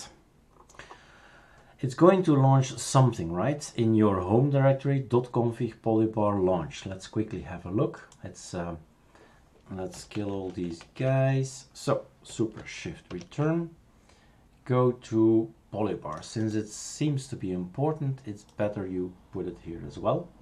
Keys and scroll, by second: 10.1 shift+super+q, 10.5 shift+super+q, 10.8 shift+super+q, 13.1 shift+super+Return.